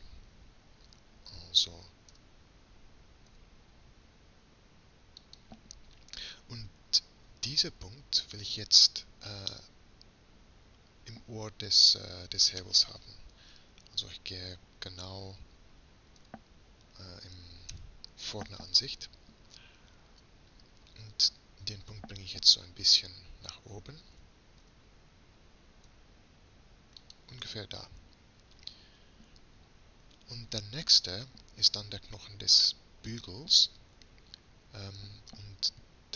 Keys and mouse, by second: 2.1 e, 9.5-13.8 middle drag, 13.8 KP_3, 16.2 KP_Decimal, 17.7 KP_1, 24.2 g, 28.6-32.4 middle drag.